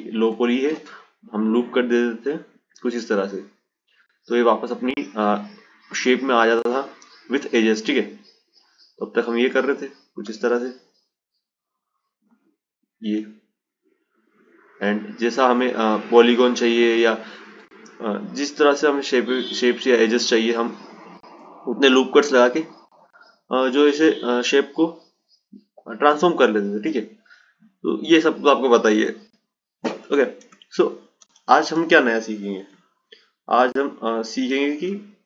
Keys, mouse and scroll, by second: 0.8 Tab, 2.2 click, 5.4-8.4 drag, 9.1-19.4 drag, 19.6-21.7 drag, 23.6-27.6 drag, 29.7 Tab, 31.0 ctrl+z, 31.5-31.9 ctrl+z, 32.4 ctrl+z, 32.5 ctrl+z, 32.6-33.2 ctrl+z, 33.6 ctrl+z, 33.8 ctrl+z.